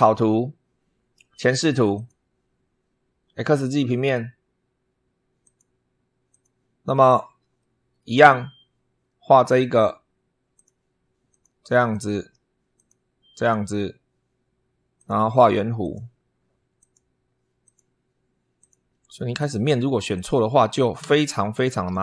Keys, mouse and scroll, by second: 1.7 click, 5.2 click, 6.1 click, 6.7-7.1 scroll up 2, 7.3 shift+middle click, 10.3 click, 11.1 click, 11.7 click, 12.5 click, 13.2 click, 14.7 click, 15.6 click, 16.5 click, 17.4 click, 18.3 click, 19.1 click, 19.9 click, 20.8 Escape, 21.3 click.